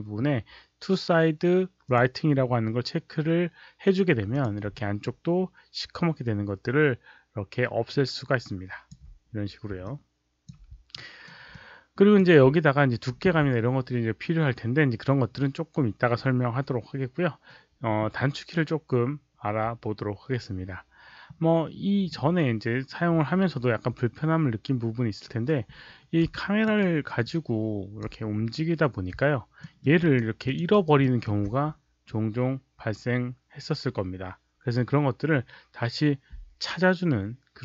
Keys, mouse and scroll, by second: 1.8 click, 4.2 click, 4.7-8.8 alt+drag, 9.7 alt+click, 10.8 alt+right click, 11.4 alt+click, 26.3 alt+drag, 26.7 alt+right click, 27.1-27.9 alt+drag, 29.5 alt+middle click, 29.9 alt+right click, 30.4 alt+click, 30.6 alt+right click, 30.9 alt+middle click, 37.5 alt+right click, 37.5 alt+click.